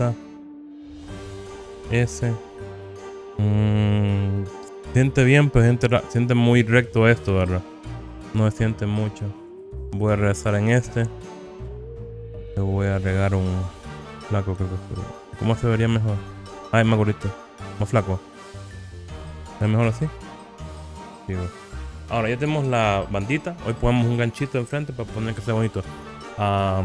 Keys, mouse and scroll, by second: 0.9 click, 2.2 s, 3.0-3.5 scroll up 4, 3.0 KP_1, 9.6 click, 10.8 Tab, 13.0 click, 18.7 click, 19.2-20.5 scroll down 3, 20.5 scroll up 1, 21.0 scroll down 1, 21.9 click.